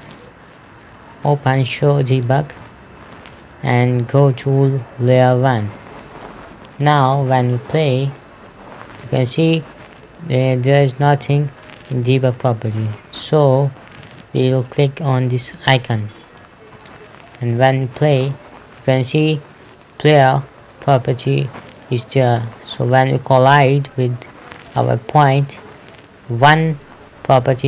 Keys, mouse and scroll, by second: 2.6 click, 5.7 click, 6.9 KP_0, 7.7 p, 11.5 Escape, 16.7 click, 18.3 p, 23.9 a, 25.2 d.